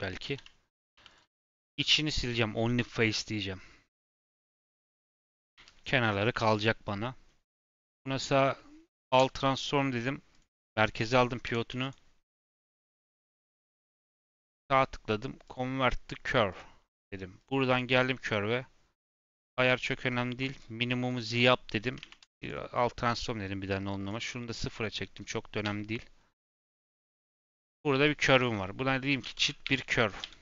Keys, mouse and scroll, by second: 0.3 /, 0.7 Tab, 0.9 3, 1.0 click, 1.7 x, 7.4 Tab, 7.6-9.0 right drag, 9.0 ctrl+a, 11.4 Tab, 11.6 a, 11.7-13.8 right drag, 13.8 Tab, 14.0-17.1 right drag, 17.3 click, 17.6 click, 19.1-21.9 drag, 21.9 ctrl+a, 23.8-25.6 drag, 25.6 /, 26.3-28.2 middle drag, 28.2 F2.